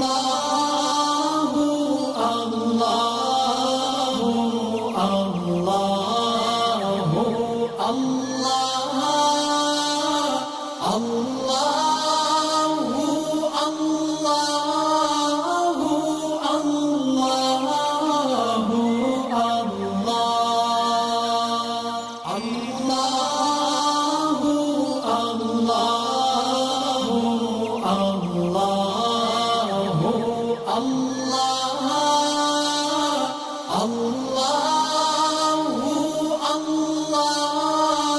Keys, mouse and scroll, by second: 3.8-6.8 shift+drag, 7.0-7.8 alt+scroll down 2, 8.2-9.8 shift+drag, 9.9 alt+scroll up 1, 10.8-12.0 drag, 12.6 alt+scroll down 1, 13.5 space, 13.7 click, 14.3 alt+scroll up 2, 14.5 click, 15.2 click, 16.5-18.7 ctrl+drag, 18.9 alt+scroll up 1, 19.2 space, 19.2 click, 19.7 alt+scroll up 1, 20.0-21.8 drag, 22.1 click, 22.6 alt+scroll down 1, 23.2 space, 23.3 click, 24.3 space, 24.4 click, 25.1 alt+scroll up 1, 25.7 click, 26.8 space, 26.9 click, 28.0 click, 30.5 alt+scroll down 1, 30.9 alt+scroll up 1, 31.2-34.7 drag, 35.1 click, 35.5 alt+scroll down 2, 36.3 click, 37.5 alt+scroll up 2.